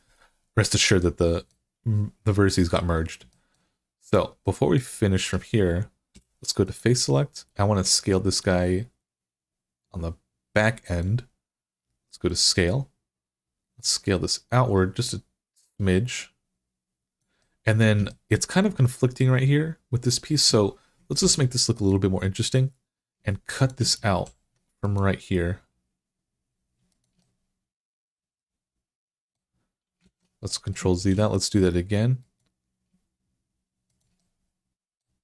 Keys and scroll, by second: 6.0 3, 21.0 ctrl+r, 24.0 ctrl+r, 29.8 ctrl+z, 30.9 ctrl+r.